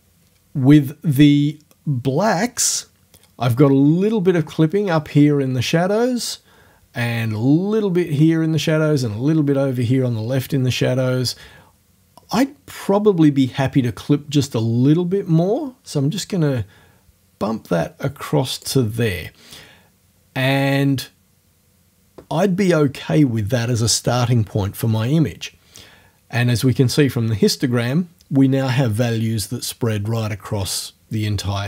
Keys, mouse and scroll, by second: 14.6-18.8 drag.